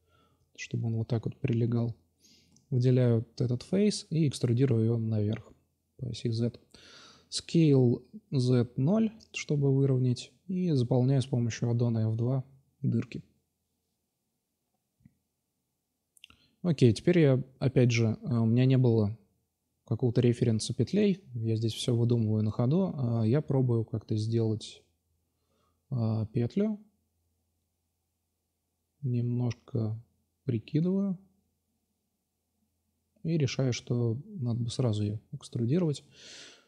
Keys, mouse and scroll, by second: 0.9-1.2 middle drag, 1.6 right click, 3.0 e, 5.3 s, 7.7 middle click, 9.0 2, 9.6 f, 9.7 f, 9.8-11.4 f, 12.7 l, 13.4 shift+d, 14.3 click, 14.8-16.0 drag, 16.1 r, 18.4-19.2 drag, 19.6-21.8 drag, 21.8-23.9 middle drag, 22.8 click, 23.9-25.6 drag, 26.5-29.9 middle drag, 30.4 x, 32.1-32.9 drag, 34.1-34.5 drag, 34.8-36.3 middle drag, 36.3-36.6 drag.